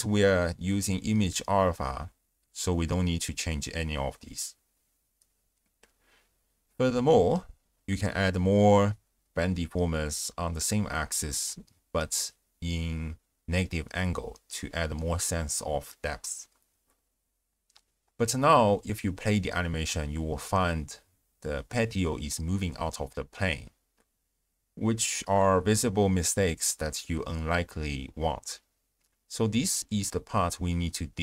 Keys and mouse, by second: 0.6 click, 2.9 space, 4.4 space, 4.7 z, 6.6 ctrl+a, 6.6 ctrl+alt+shift+q, 7.0 click, 7.4 click, 7.7 click, 7.9 ctrl+a, 9.1 click, 9.4 click, 10.9 click, 11.7 shift+space, 12.0 click, 12.5 z, 13.9 space, 14.1 space, 14.2 click, 14.8 space, 15.8 space, 16.2 drag, 16.6-17.0 shift+drag, 17.1 click, 18.0 shift+space, 18.6-19.3 d, 18.8 click, 20.3 d, 20.4 shift+space, 22.2 space, 22.6-24.3 d, 22.9 click, 27.7 shift+space.